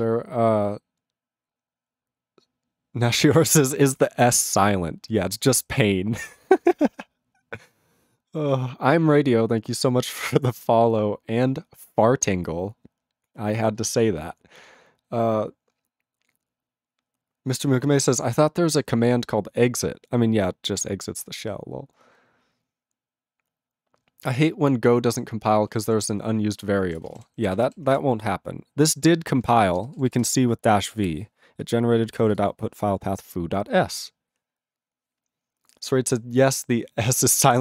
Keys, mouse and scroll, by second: 25.9 Return, 26.9 ctrl+a, 26.9 ctrl+space, 27.0 ctrl+e, 27.1 ctrl+g, 27.5 ctrl+s.